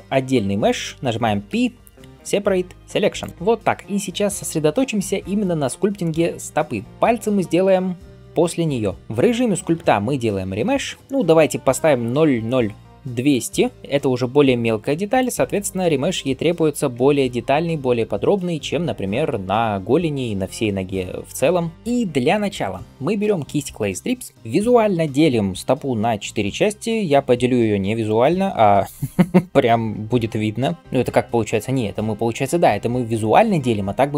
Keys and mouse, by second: 1.4 p, 9.0-29.8 drag, 10.5 shift+r, 16.8 ctrl+r, 29.8-32.1 d.